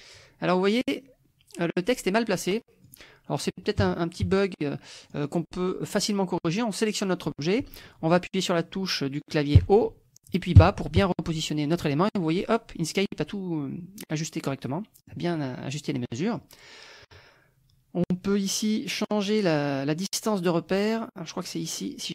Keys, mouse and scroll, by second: 2.8 click, 3.8 KP_Subtract, 4.3 KP_Add, 5.0 click, 9.6 Up, 10.6 Down, 14.7 click, 16.0-18.6 drag, 21.4 click.